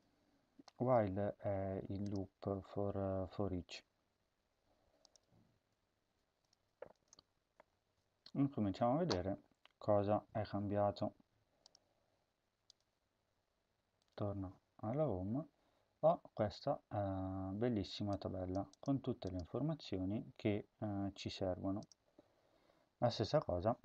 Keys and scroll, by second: 7.6 ctrl+s.